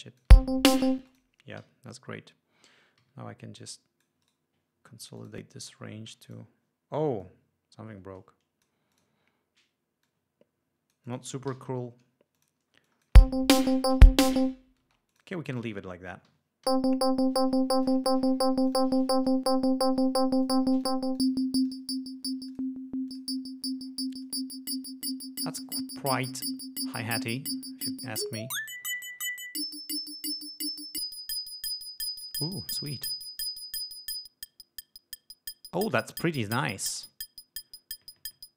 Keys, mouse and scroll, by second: 0.2 click, 0.5 space, 1.3 space, 1.3 click, 1.8 alt+d, 3.2 r, 3.7 click, 4.4 right click, 5.4 click, 6.3 g, 6.5 click, 7.4-9.0 drag, 9.1 click, 10.3-11.6 drag, 11.7 alt+d, 12.6 click, 13.1 click, 13.4 space, 14.1 ctrl+scroll down 2, 15.1 space, 15.3 click, 16.5 ö, 16.9 l, 18.0 click, 18.8 click, 20.7 click, 21.0 click, 21.4 click, 21.9 click, 22.7 click, 23.3 click, 24.4 click, 28.2-32.6 drag, 33.3-33.7 drag, 33.8-36.6 drag.